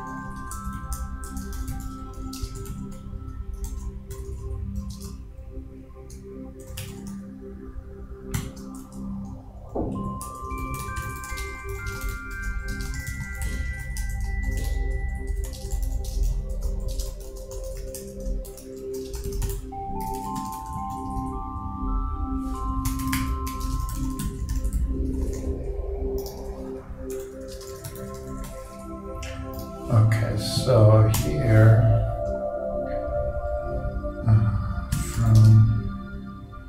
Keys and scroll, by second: 1.4 shift+Return, 1.6 shift+m, 2.4 shift+space, 2.8 shift+o, 4.1 shift+., 5.1 shift+space, 6.6 shift+c, 8.4 shift+e, 8.8 shift+Return, 10.5 shift+Return, 10.6 shift+p, 12.0-14.5 typing, 14.2 shift+Return, 16.1-19.4 typing, 18.3 shift+Return, 23.5-24.4 typing, 26.8 shift+Return, 26.9-28.2 typing, 34.9 shift+f, 35.5 shift+space.